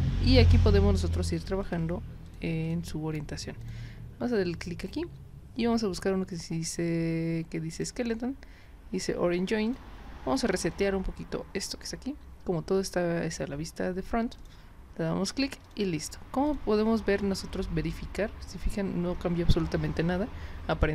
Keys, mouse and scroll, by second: 0.4 click, 1.6 click, 2.3 click, 2.6 click, 3.6 click, 7.7 click, 9.7 click, 10.7 click, 11.6 click, 14.4 click, 15.6 click, 16.5 click.